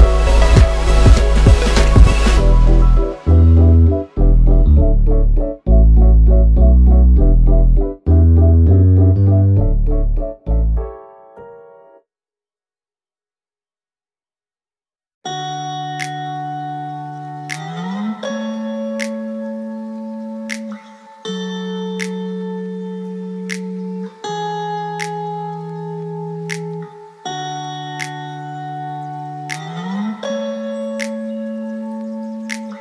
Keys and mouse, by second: 1.7 click, 3.0 ctrl+KP_Add, 3.6 ctrl+KP_Add, 5.4 click, 6.8-7.1 drag, 6.8-7.1 middle drag, 8.8 click, 10.9 ctrl+b, 27.0 shift+Tab, 27.3 click, 27.7 w, 29.5 drag, 30.8 q.